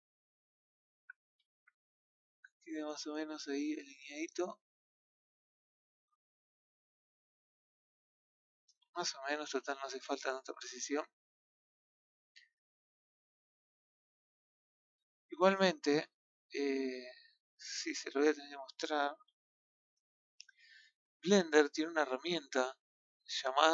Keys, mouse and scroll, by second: 0.7-1.1 scroll up 6, 1.4-1.7 scroll down 5, 1.7 shift+middle click, 2.2-2.8 scroll up 4, 3.6 click, 5.7-6.0 scroll down 5, 6.2-7.7 shift+middle drag, 8.1 click, 8.8 middle click, 9.7 click, 10.6 KP_1, 11.8-13.1 scroll up 2, 13.1 scroll up 1, 13.1 click, 14.9-15.4 scroll down 10, 15.4-16.6 middle drag, 16.9 middle click, 17.6-19.1 scroll down 1, 19.1-19.9 scroll down 8, 19.2 z, 20.0 shift+middle click, 20.6-21.3 shift+scroll up 2, 21.3 scroll up 2, 21.3-23.7 middle drag.